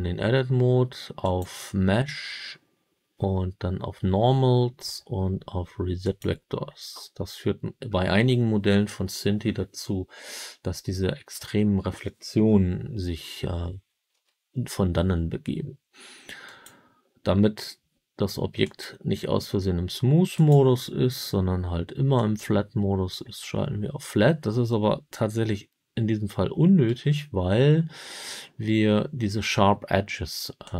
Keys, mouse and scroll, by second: 1.1-6.1 drag, 14.0 Tab, 16.4-18.7 drag, 20.3-22.3 drag, 26.8 Tab, 30.6-30.7 drag.